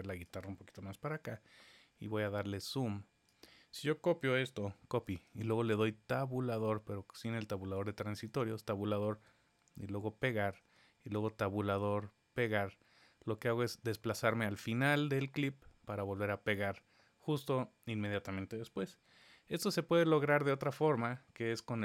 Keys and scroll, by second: 5.0 super+c, 10.1 super+v, 12.3 super+v, 15.0 super+v, 18.6 super+z, 18.9 super+z.